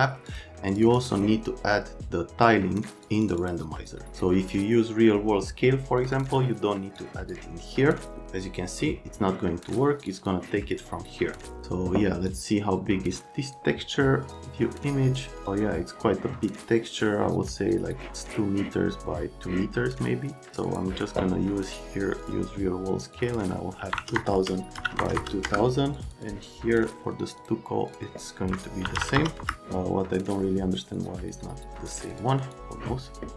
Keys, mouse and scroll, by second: 0.3 click, 0.7 click, 0.8 click, 3.2 click, 3.4 click, 6.0 click, 6.1 click, 6.9 click, 9.7 click, 10.0 click, 10.1 click, 12.3 click, 14.3 click, 20.3 click, 20.7 click, 22.2 click, 23.0 click, 23.8-25.1 typing, 25.4 KP_Enter, 25.9 click, 26.1 click, 27.4 click, 28.8 KP_2, 29.0 KP_0, 29.2 KP_0, 29.4 KP_0, 30.2 click, 31.0 click, 32.1 click, 32.4 click.